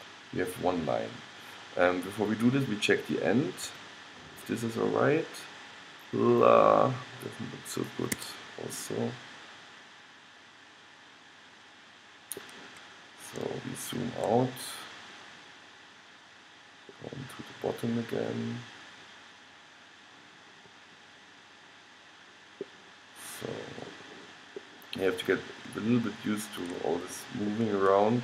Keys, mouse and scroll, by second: 2.4-4.3 drag, 3.8 g, 9.1-10.8 middle drag, 10.9 middle click, 13.1-15.8 middle drag, 17.2-18.6 middle drag, 19.7 middle click, 19.8 middle click, 20.4 middle click, 20.9 middle click, 21.6-22.7 middle drag, 23.1-24.7 middle drag, 26.9 middle click.